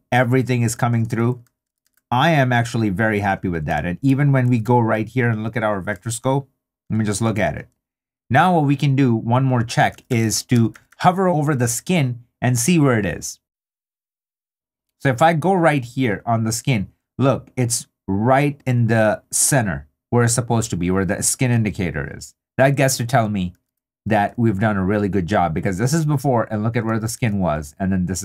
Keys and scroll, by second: 1.6 super+d, 5.5 super+d, 6.1 super+d, 9.7 2, 23.5 super+d, 27.2 super+d.